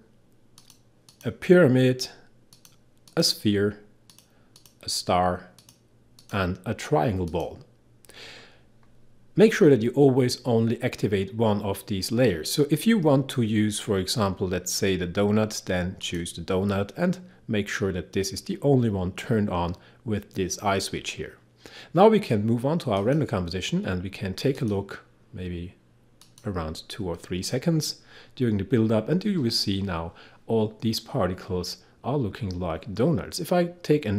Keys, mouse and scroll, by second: 23.2 click.